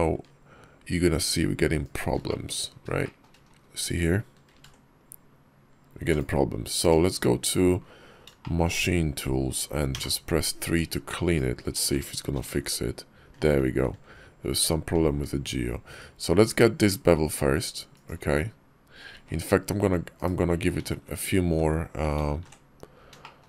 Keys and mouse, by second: 2.1 shift+click, 2.7 shift+middle click, 2.9 shift+click, 4.3 ctrl+b, 6.6 Tab, 8.2 shift+click, 10.5 Tab, 10.5 3, 11.1 alt+click, 12.2 ctrl+b, 19.0 ctrl+x, 20.0 /, 20.7 ctrl+x, 22.0 ctrl+z, 22.2 ctrl+z, 23.1 shift+middle click.